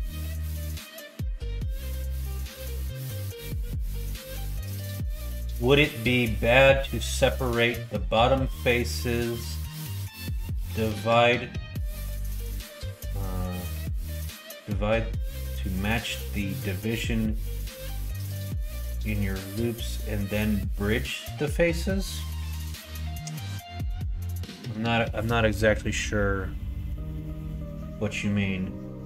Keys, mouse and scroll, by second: 25.9 middle click.